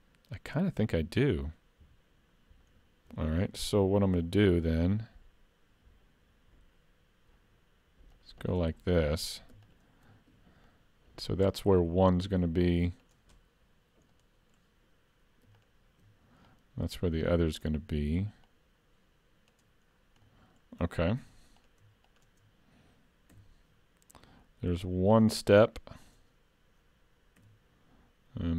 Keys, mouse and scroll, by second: 4.2 ctrl+r, 9.7 alt+click, 10.7 click, 13.7-15.5 scroll up 2, 14.2 middle click, 15.6 alt+click, 16.5 click, 18.5 click, 20.0 scroll down 1, 20.3 middle click, 21.2 3, 21.6 click, 22.1 shift+click, 23.4 e, 26.1 click, 27.4 e.